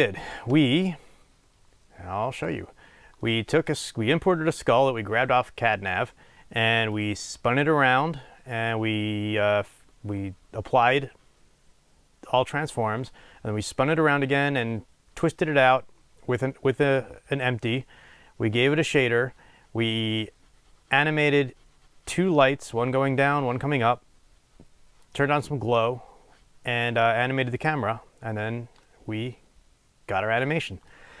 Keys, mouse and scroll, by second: 3.3-31.2 middle drag, 4.0 scroll down 1, 19.0 click.